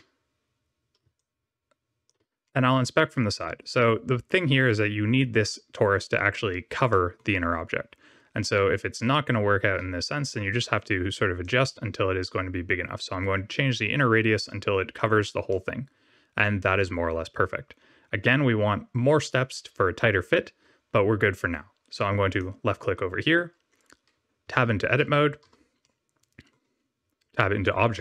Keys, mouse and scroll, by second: 1.1 shift+click, 2.4 middle click, 3.7-4.1 scroll up 2, 4.9-5.4 scroll down 1, 6.8 middle click, 11.3 shift+click, 15.4 middle click, 22.2 click, 24.4 Tab, 24.8 w, 25.3 w, 25.8 middle click.